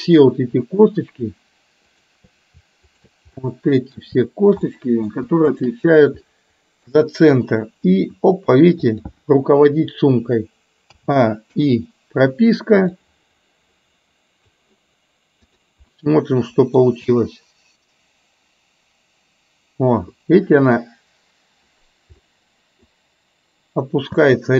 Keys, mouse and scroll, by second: 1.9 shift+click, 2.9 shift+click, 3.4-4.2 middle drag, 4.8-5.3 middle drag, 6.3 middle click, 7.0 middle click, 8.5 r, 10.9 a, 11.5 i, 13.0-14.5 drag, 15.5 click, 16.0-17.0 middle drag, 18.5 space, 22.2-22.9 middle drag.